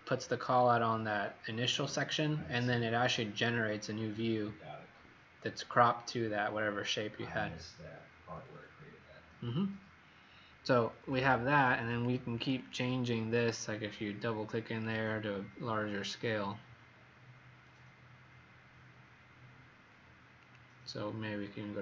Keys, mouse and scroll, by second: 12.3 click, 14.8 click.